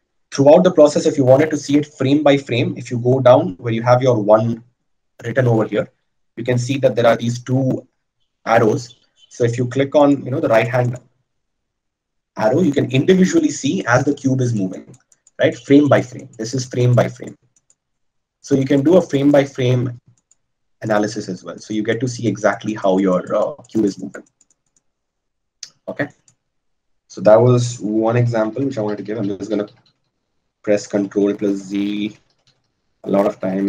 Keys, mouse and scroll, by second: 26.7-27.8 drag, 27.8 right click, 28.4-33.6 ctrl+z.